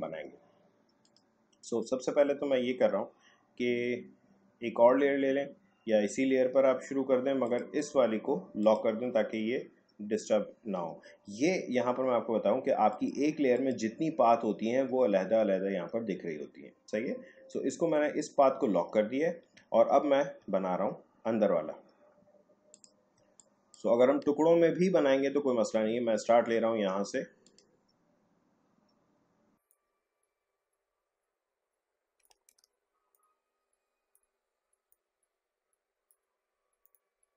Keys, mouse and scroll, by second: 1.0 click, 7.4 click, 12.9 click, 19.5 click, 19.8 alt+scroll up 1, 22.7 click, 23.1 space, 23.4 click, 23.7 space, 27.4-32.5 drag, 32.5 ctrl+z, 33.1-36.8 drag.